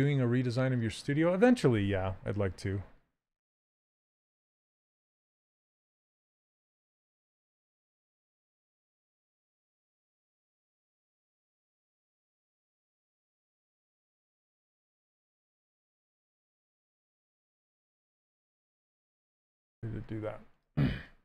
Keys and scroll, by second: 8.5 2, 15.0 q.